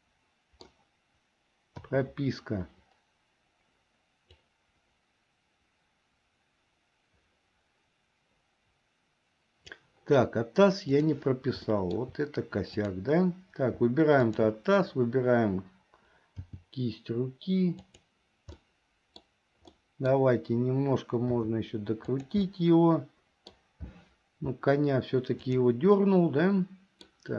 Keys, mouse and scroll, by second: 1.9 i, 4.5-10.0 drag, 11.1 click, 11.8 shift+middle click, 12.9 click, 14.3 shift+click, 16.4 g, 18.7 middle click, 19.9-20.3 scroll up 1, 21.5 r, 22.6-23.6 middle drag, 25.5 click, 26.1-27.3 middle drag.